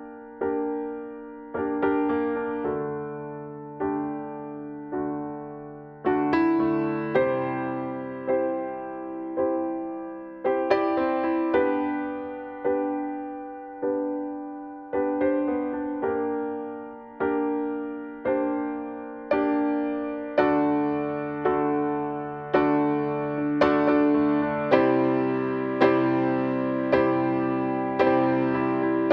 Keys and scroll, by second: 8.3 ctrl+e, 10.6 ctrl+e, 15.6 ctrl+u, 17.0 ctrl+u.